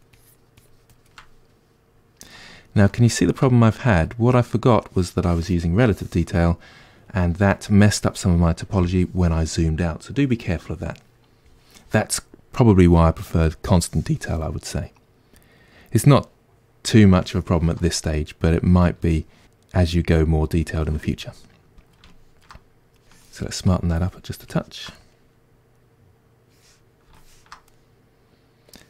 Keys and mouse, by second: 1.5-23.1 middle drag, 23.1-27.8 ctrl+drag, 27.8-28.8 middle drag.